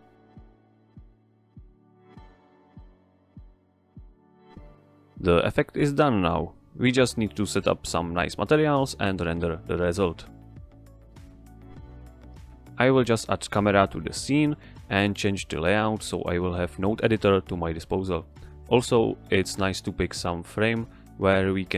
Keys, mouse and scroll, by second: 0.9 BackSpace, 2.4 Tab, 3.6 Return, 9.5 click, 11.5 Escape, 13.7 shift+a, 14.4 click, 15.5 g, 15.5 middle click, 16.6 click, 17.0 scroll down 1, 17.2 g, 19.0 click, 19.7 ctrl+Right.